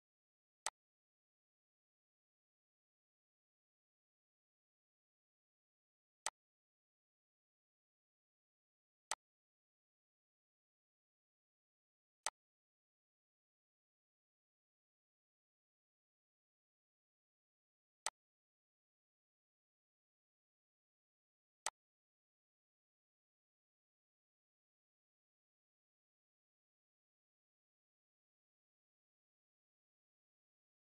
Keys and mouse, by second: 0.0 click, 7.4 click, 9.0 click, 14.0 click, 15.0 click, 15.7 click, 16.6 click, 20.0 click, 20.6 click, 22.0 click, 22.5 click, 23.4 click, 26.1 click, 27.3 click, 30.0 click.